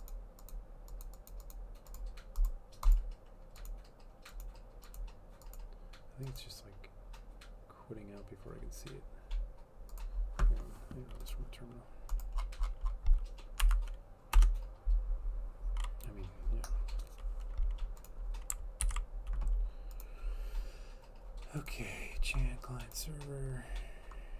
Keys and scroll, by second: 14.4 Up, 19.0 ctrl+c.